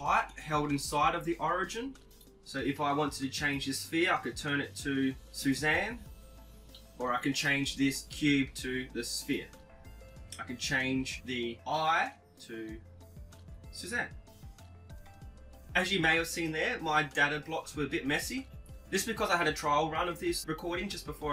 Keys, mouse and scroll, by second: 0.7-2.5 right drag, 2.1-3.9 drag, 6.5-8.3 right drag, 7.4-9.3 drag, 11.0 right click, 11.6-13.1 drag, 16.0-17.8 right drag, 17.0 middle click, 18.1 x, 20.1 KP_7.